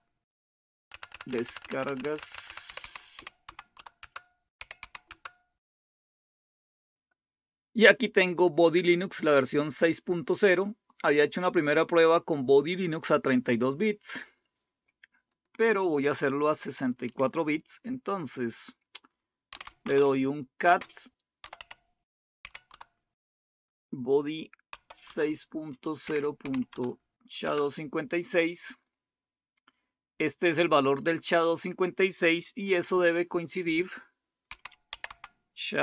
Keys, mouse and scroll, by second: 0.8-5.0 typing, 3.9 Return, 14.2 click, 15.4 click, 19.2-22.6 typing, 24.6-27.4 typing, 29.1-29.8 typing, 31.5 click, 34.2-35.8 typing.